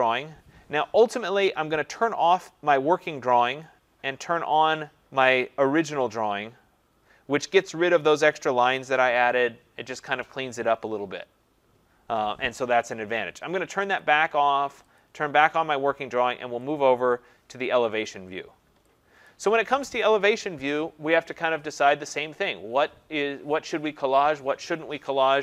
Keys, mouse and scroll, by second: 3.7 click, 4.6 click, 14.0 click, 15.0 click, 18.1 click, 19.3 click.